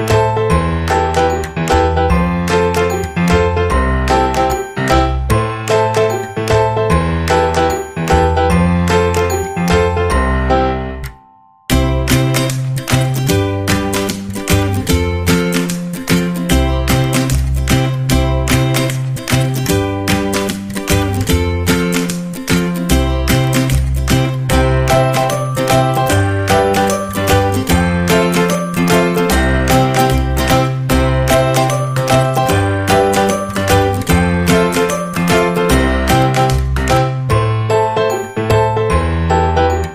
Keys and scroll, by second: 19.3 KP_1, 19.6 Return, 24.6 space.